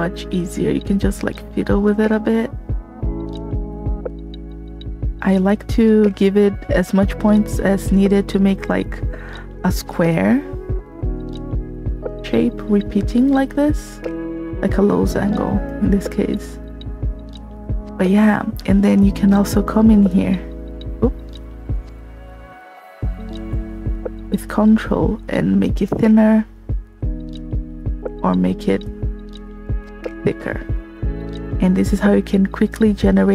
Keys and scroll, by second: 15.6 space, 21.7 alt+z.